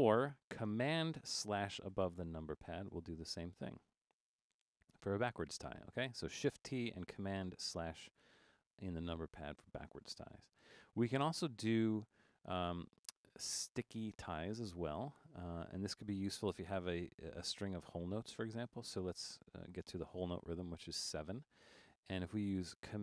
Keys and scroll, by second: 2.0 super+/, 2.9 super+/, 4.2 super+/, 5.0 super+/, 12.7 super+Down, 13.3 Left, 13.8 Left, 19.5 7.